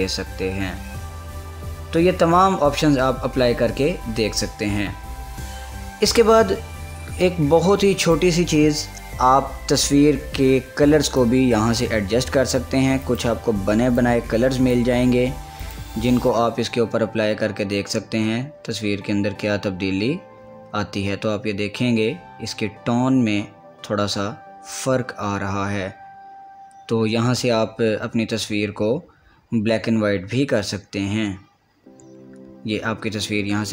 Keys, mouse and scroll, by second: 8.7 click, 11.8 click, 13.7-16.3 drag.